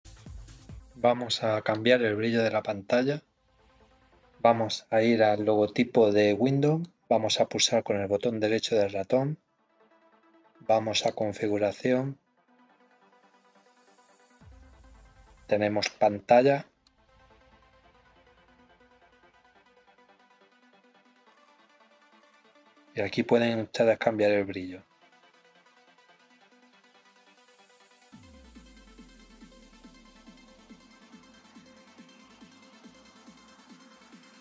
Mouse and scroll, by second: 1.7 click, 6.8 right click, 11.0 click, 16.8 click, 21.5-28.8 drag, 29.3-30.3 drag, 31.4 click, 33.7 click.